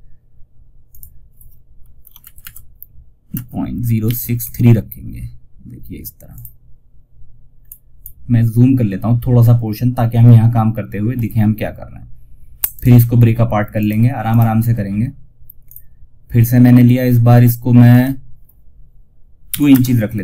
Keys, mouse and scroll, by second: 0.2 click, 1.5 shift+Right, 5.6 click, 6.9 scroll up 1, 12.0 right click, 13.0 click, 17.2 click.